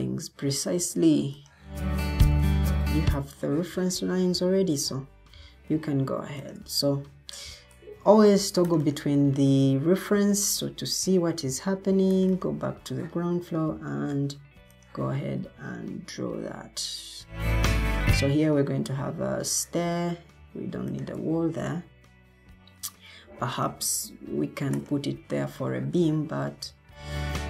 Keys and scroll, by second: 23.0 Escape.